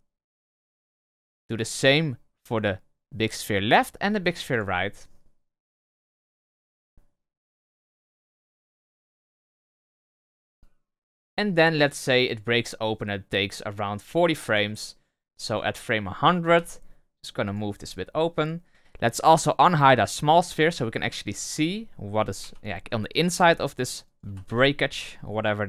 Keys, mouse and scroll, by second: 1.1 right click, 6.2-6.6 drag, 6.6 space, 10.3 space, 10.6-13.6 drag, 15.4 right click, 16.5 g, 17.6 r, 20.4 click, 21.4 right click, 22.4 g, 23.4 r, 24.3 r.